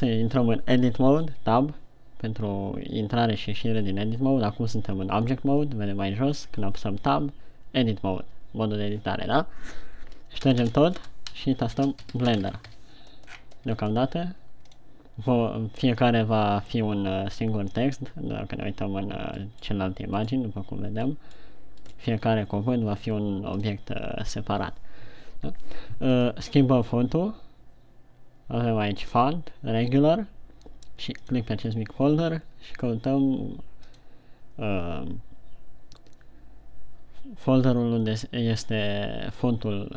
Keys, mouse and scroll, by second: 0.3 Tab, 1.8 Tab, 7.0 Tab, 10.9-13.1 typing, 13.7-14.3 scroll down 4, 14.3 Tab, 31.6 click.